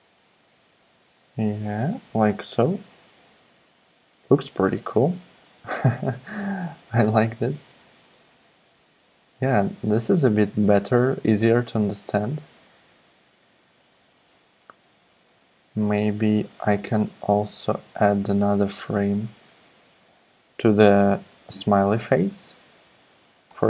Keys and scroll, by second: 0.2 Right, 22.0 super+d, 23.5 Return.